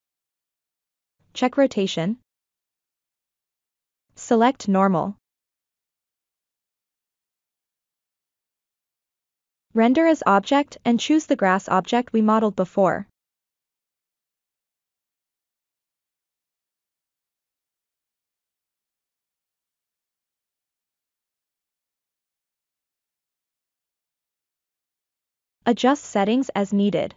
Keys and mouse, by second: 0.0 click, 1.0 click, 1.6 click, 2.4 click, 3.7 click, 4.3-5.8 drag, 6.7 drag, 7.4 click, 8.5 click, 9.5-10.2 drag, 14.5-15.2 middle drag, 15.6-16.0 shift+middle drag, 16.5 click, 18.4-19.1 middle drag, 19.2-19.6 shift+middle drag, 20.7 click, 23.1 click, 24.6-25.4 drag, 25.8-27.1 drag.